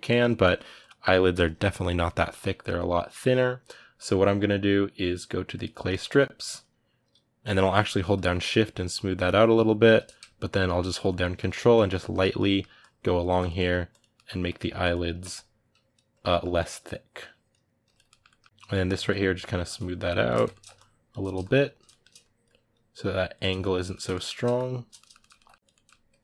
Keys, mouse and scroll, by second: 0.2 middle click, 0.6 click, 1.0-5.4 middle drag, 5.4 click, 5.7-7.9 ctrl+middle drag, 7.9-9.8 shift+drag, 9.8 middle click, 10.2 ctrl+click, 10.8 ctrl+middle click, 11.1-12.2 ctrl+drag, 12.2 ctrl+middle click, 12.5 ctrl+click, 13.3 ctrl+middle click, 13.7 ctrl+click, 13.9 ctrl+middle click, 14.6-16.0 ctrl+drag, 16.0 middle click, 16.3-17.8 ctrl+drag, 17.8 ctrl+middle click, 18.5-20.1 shift+drag, 20.1 ctrl+middle click, 20.5-21.6 shift+drag, 21.6 middle click, 22.0-23.2 shift+drag, 23.2 middle click, 23.7 shift+click, 23.9 ctrl+middle click, 24.3 shift+click, 24.7-25.8 shift+middle drag, 25.8 ctrl+click, 26.0 ctrl+middle click.